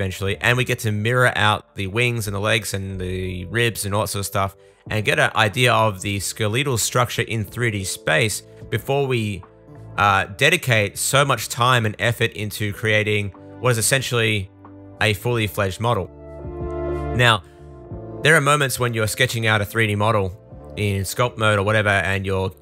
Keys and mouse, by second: 0.3 super+z, 0.5 super+z, 1.1 super+z, 7.7 super+z, 10.4 super+s, 12.5 super+z, 12.7 super+z, 12.7 super+z, 12.8 super+s, 13.1 super+z, 13.6 super+z, 14.3-15.7 shift+super+drag, 14.3 shift+super+middle click, 14.3 shift+super+right click, 14.5 super+z, 15.9 super+z, 16.2 super+z, 17.8 super+z, 18.0 super+z, 18.4 super+z, 18.6 super+z, 19.1 super+z, 19.2 super+z, 20.4 super+z, 20.7 super+z, 21.5 super+z, 22.1 super+z, 22.2 super+z.